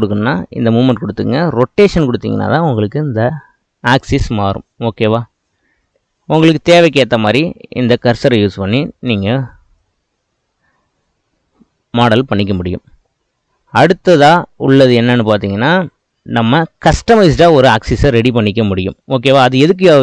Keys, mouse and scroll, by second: 2.4-5.5 drag, 14.9-17.9 drag, 19.3-20.0 shift+middle drag.